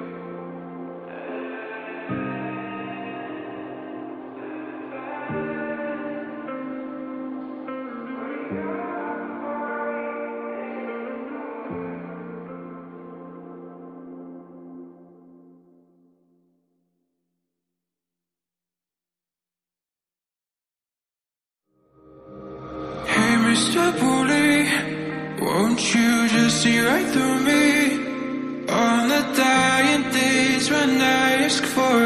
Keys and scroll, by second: 15.9 ctrl+j, 16.8 ctrl+g.